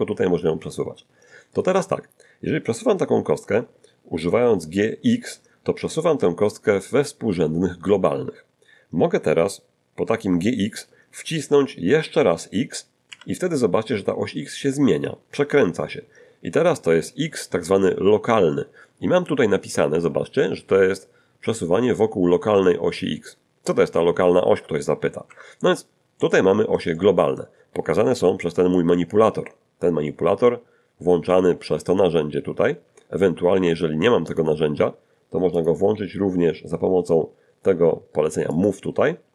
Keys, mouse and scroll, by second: 13.1 x, 25.3 Escape, 26.3-27.6 middle drag, 28.1-28.5 scroll up 2, 28.5-29.0 scroll down 2, 31.2 t, 32.8 t, 33.5 t, 34.3 click, 35.6 click, 38.5 click.